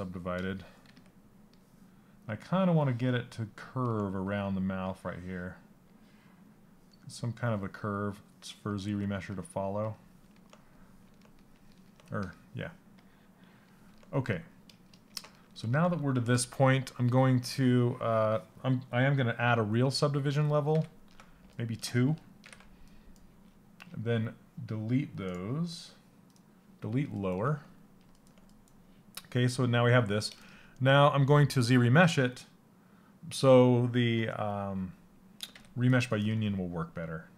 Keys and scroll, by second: 20.3 ctrl+d, 21.9 ctrl+d.